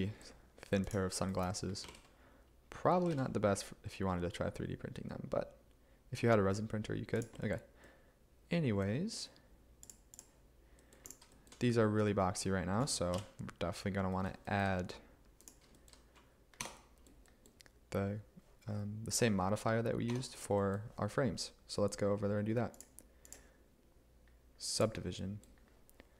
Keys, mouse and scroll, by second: 1.9 g, 2.0 z, 3.2 x, 13.2 5, 16.6 Tab, 20.1 Tab.